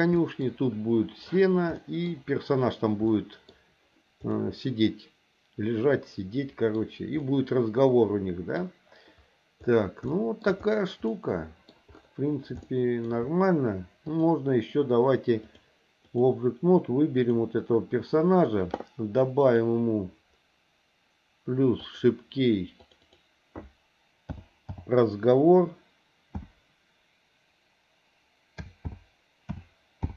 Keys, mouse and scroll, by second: 0.1 middle click, 1.8 middle click, 3.1 middle click, 4.3-6.7 middle drag, 7.2-8.5 middle drag, 10.1 shift+middle click, 11.0 middle click, 12.6 shift+middle click, 14.1 click, 15.4 click, 17.2 click, 19.4 click, 21.8 click, 22.8 click, 23.0-30.1 drag.